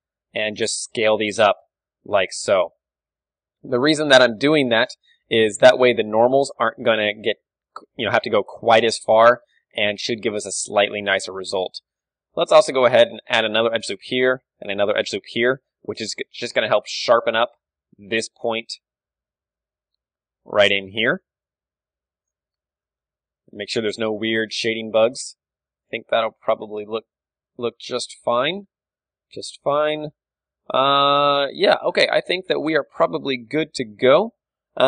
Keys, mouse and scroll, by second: 1.6 click, 1.8-3.6 middle drag, 2.4-4.4 typing, 5.1 Tab, 5.1-7.9 middle drag, 5.6 KP_1, 7.9 Tab, 8.7 Tab, 9.0-14.7 middle drag, 9.9 a, 10.4 a, 11.1 Tab, 13.2 ctrl+r, 14.7 ctrl+r, 14.7-17.2 right drag, 15.4 Tab, 16.5 Tab, 17.2 d, 17.3-19.1 drag, 18.3 d, 18.5 d, 19.1 d, 19.1-21.1 middle drag, 19.5-22.7 drag, 21.1 d, 21.9 d, 22.7 Tab, 22.9-28.6 middle drag, 24.6 a, 25.4 a, 25.8 ctrl+w, 28.2 KP_3, 29.6 KP_1, 30.9 middle click, 32.1 middle click.